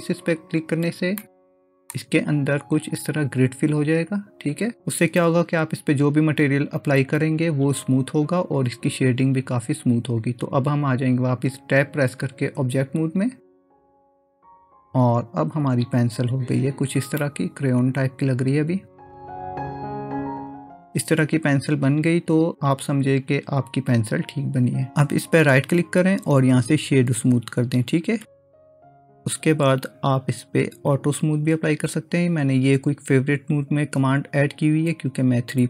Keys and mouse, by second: 1.3 middle click, 12.6 Tab, 13.8-14.5 middle drag, 17.2-20.7 middle drag, 25.5-30.5 right drag, 30.5 q.